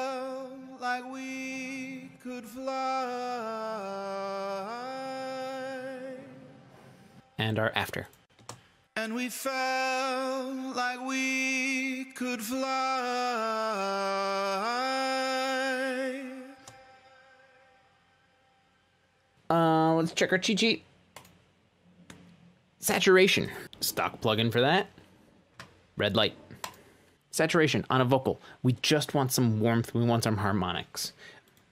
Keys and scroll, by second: 7.9 space, 9.4 space, 17.6 space.